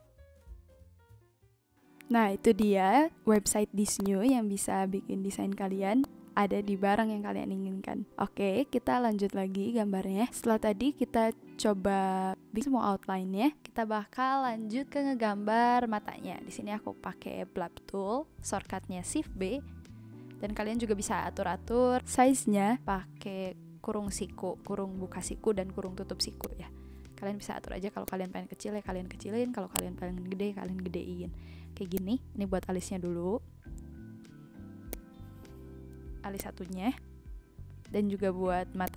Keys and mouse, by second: 2.4 click, 2.6 click, 3.3 click, 3.8 a, 3.8 click, 26.4 click, 26.7 ctrl+z, 28.0 click, 28.4 ctrl+z, 29.7 click, 31.9 click, 34.9 click, 36.3 click, 37.9 [, 38.8 click.